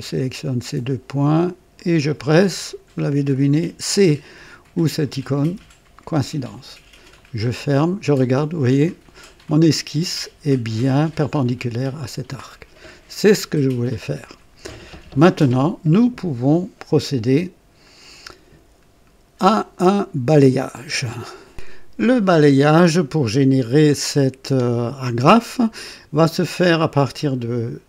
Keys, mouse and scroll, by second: 1.7 click, 2.4 typing, 5.4 typing, 7.1 click, 13.0 scroll down 1, 13.6-14.4 right drag, 21.4 right click.